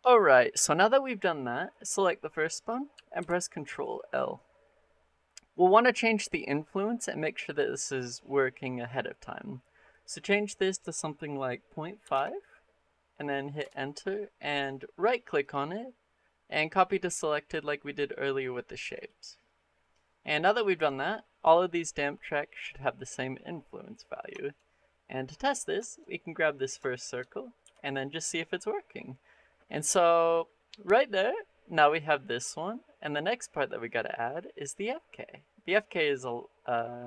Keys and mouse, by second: 3.0 ctrl+l, 9.8-13.4 drag, 15.3-18.9 drag, 24.2 shift+middle drag, 25.2 click, 25.7 shift+middle click, 25.9 middle click, 26.4 middle drag, 26.8 shift+middle drag, 27.1 middle click, 27.5 r.